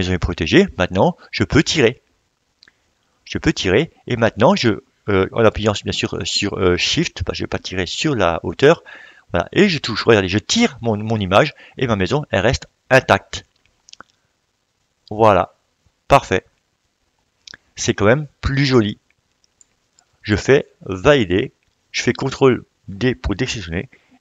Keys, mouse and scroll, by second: 11.0 click, 11.1-17.5 drag, 19.6-24.2 shift+drag.